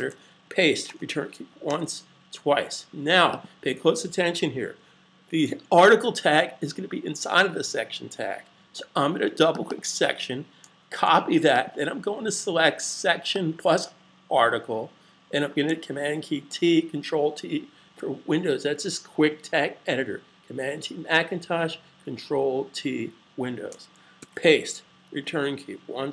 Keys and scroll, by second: 10.6 super+c, 16.3 super+t, 24.1 super+v.